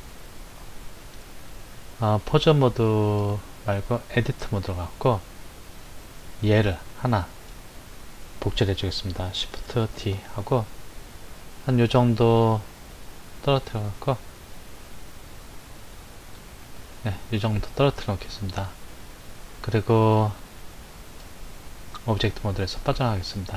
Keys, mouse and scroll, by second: 1.8 click, 3.1-5.9 drag, 7.4 click, 9.9 shift+d, 18.8 click, 21.1-23.0 drag.